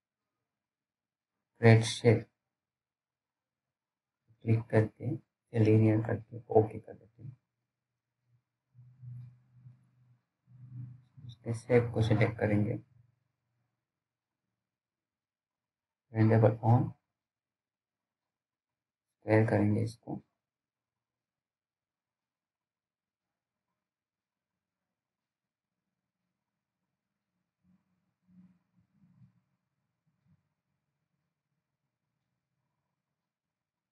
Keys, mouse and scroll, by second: 3.2-3.5 scroll up 1, 4.6 click, 7.7-8.1 scroll up 1, 8.1 right click, 8.7 click, 8.7 click, 15.0-15.9 scroll up 1, 16.4 click, 17.8-18.3 scroll down 1, 18.3 middle click, 18.6-19.1 scroll up 1, 19.1 middle click, 21.7 click, 24.9 scroll down 1, 25.3 alt+middle click, 25.9-26.6 scroll up 1, 27.1 click.